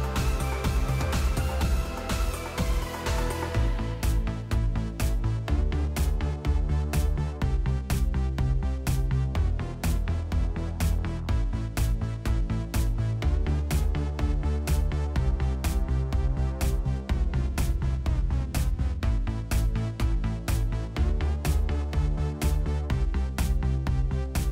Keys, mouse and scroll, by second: 0.6 click, 1.1-2.3 typing, 4.2 Return, 5.0 Return, 6.1 space, 6.8 click, 7.2 click, 7.7 space, 8.9-11.7 typing, 9.7 click, 12.6 click, 12.8 click, 14.4 middle click, 14.4 middle click, 15.7 click, 16.3 click, 16.4-17.2 typing, 18.7 Tab, 19.0 Tab, 19.2 Tab, 20.0-23.0 typing.